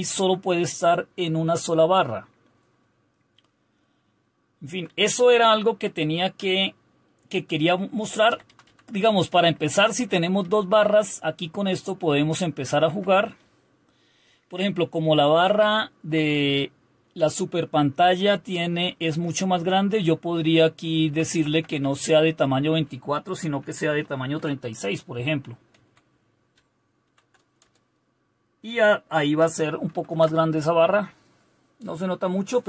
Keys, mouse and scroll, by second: 0.0 Right, 0.1 Right, 3.5-8.5 Down, 8.6 Down, 9.5 Up, 9.8 Up, 10.1 Up, 10.5 Up, 11.3-13.4 Up, 13.4 Down, 14.0 Down, 14.1 Down, 14.4 Down, 17.9 Up, 18.1 Up, 18.5 Up, 18.7 Up, 19.0 Up, 19.3 Up, 21.0 Down, 21.3 Left, 21.7 Left, 23.5 Delete, 23.7 Delete, 23.9-24.4 typing, 25.7 Right, 27.0 ctrl+o, 27.6 Return, 29.9 ctrl+super+r.